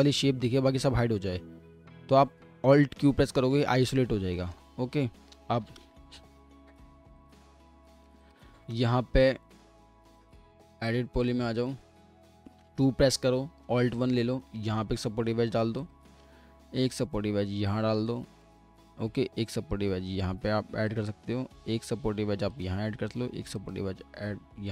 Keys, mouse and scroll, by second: 3.0 alt+q, 3.8-4.2 scroll up 1, 4.3 alt+middle click, 4.8 alt+scroll up 2, 5.8 typing, 8.7 typing, 12.6 typing, 13.7 alt+1, 18.7 scroll up 1, 24.0 typing.